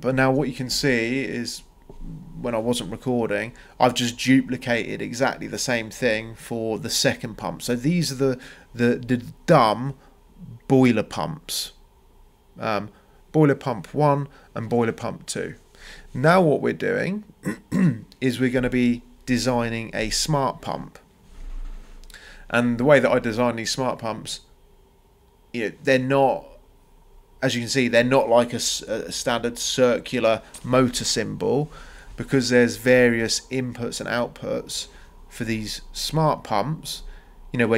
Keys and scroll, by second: 29.8 ctrl+c, 30.1 ctrl+v.